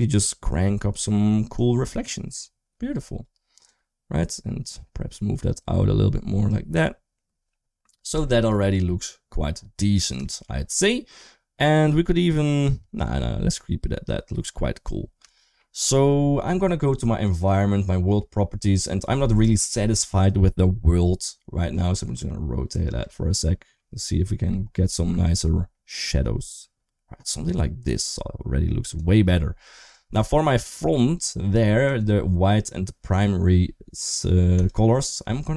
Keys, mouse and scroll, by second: 1.5 click, 3.5-6.4 drag, 8.1 shift+middle drag, 10.1 shift+middle click, 15.2 shift+middle drag, 17.1 click, 22.7-28.8 drag, 29.7 click, 30.0 click, 34.4 click.